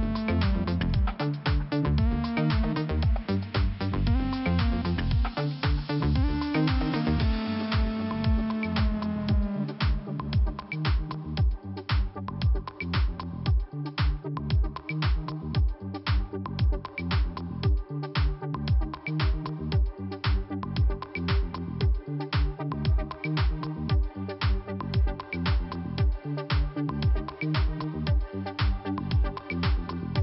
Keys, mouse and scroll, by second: 1.0 click, 2.9 click, 3.0 click, 3.3 Delete, 3.7 click, 3.8 click, 4.6 i, 5.7 scroll up 2, 6.8 click, 6.9 click, 7.4 scroll up 1, 7.9 click, 9.6 click, 11.2 click, 12.1 click, 12.2 click, 12.6 click, 13.9 click, 15.2 click, 15.9 click, 16.5 click, 17.4 click, 17.9 click, 18.6 click, 22.0 click, 22.1 click, 22.4 click, 23.4 click, 24.0 click, 28.9 scroll down 2.